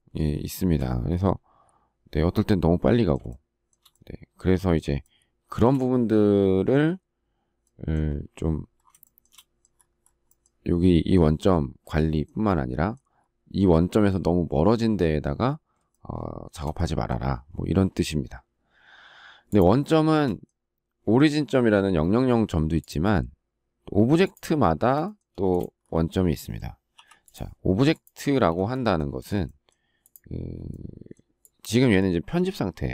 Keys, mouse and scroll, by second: 3.3 shift+middle click, 5.0 shift+middle click, 9.0 shift+middle click, 15.9 shift+middle click, 20.1 shift+middle click, 24.6 shift+middle click, 25.3 space, 28.3 space.